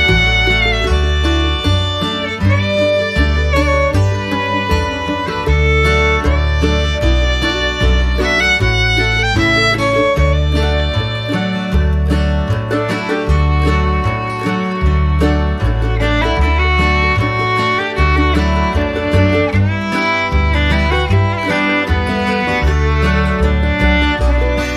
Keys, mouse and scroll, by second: 1.2 shift+click.